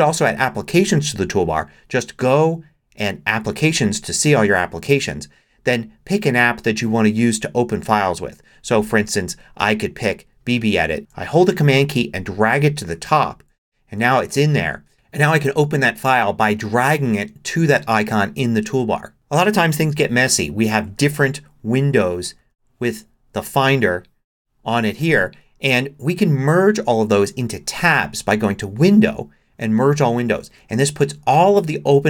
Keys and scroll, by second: 20.6 super+n, 22.4 super+n.